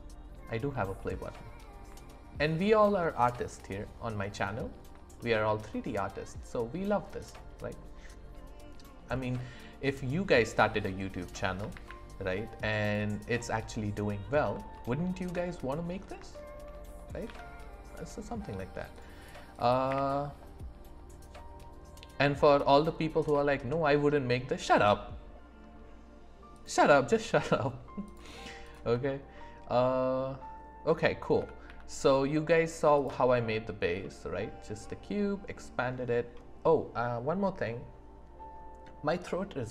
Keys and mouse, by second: 1.1 middle drag, 1.3-1.7 drag, 1.3-1.7 right drag, 2.0 shift+middle drag, 4.1-4.7 middle drag, 5.1 shift+middle drag, 5.7 middle click, 9.1 middle click, 10.8 click, 10.8 right click, 11.7 shift+a, 16.3 shift+click, 17.2 z, 19.8 q, 27.2 click, 27.2 right click, 28.1 click, 31.3 s, 31.6 z, 32.9-34.0 drag, 34.0 middle click.